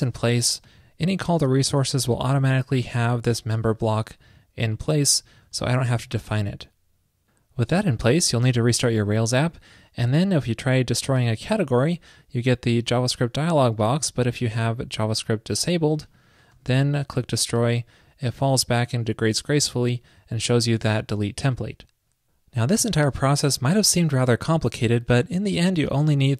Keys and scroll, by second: 6.1 super+s, 14.8 super+,, 16.6 super+w.